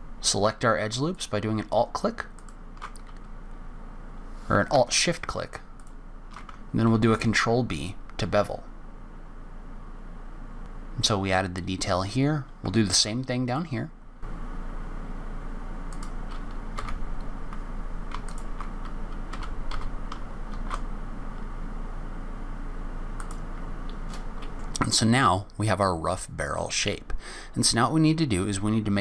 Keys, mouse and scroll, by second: 10.6 middle click, 10.6 scroll up 2, 10.9-11.7 scroll down 10, 11.7-12.7 scroll up 5, 12.7 scroll up 1, 12.9 ctrl+r, 15.2 3, 15.7 alt+click, 16.1 e, 17.7-18.6 scroll up 8, 18.6 2, 19.0 click, 19.3 alt+click, 20.0 alt+shift+click, 20.4 ctrl+b, 23.7-24.3 scroll down 16, 24.3 click, 24.4 middle click.